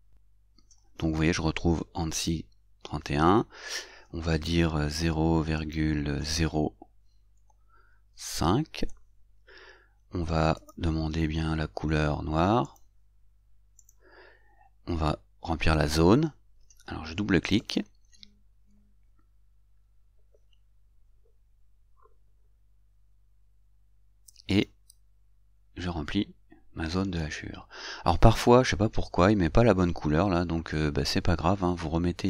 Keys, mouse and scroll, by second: 2.4 click, 7.7 shift+0, 8.5 shift+5, 12.9 click, 14.2 click, 17.8 click, 24.8 click.